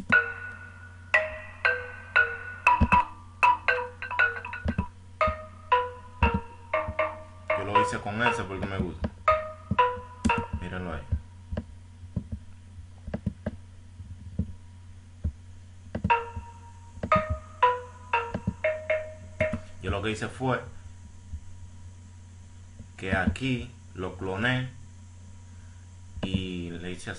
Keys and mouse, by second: 16.4 F1, 16.4 F5, 18.1-20.0 drag, 20.5 click, 21.0 click, 21.4 click.